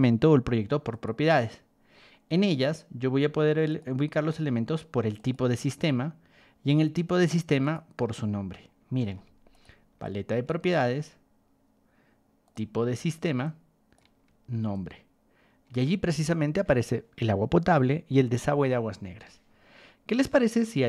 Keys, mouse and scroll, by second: 0.9 click, 3.7 click, 5.1 click, 6.2 middle click, 7.6 click, 9.1 ctrl+1, 9.5 click, 10.0 ctrl+click, 10.6 right click, 12.4 click, 13.4 ctrl+click, 14.7 ctrl+click, 19.1 Escape.